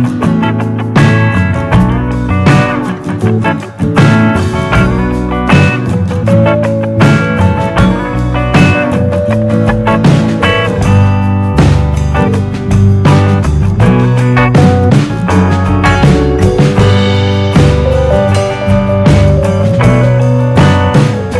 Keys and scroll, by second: 17.8 d.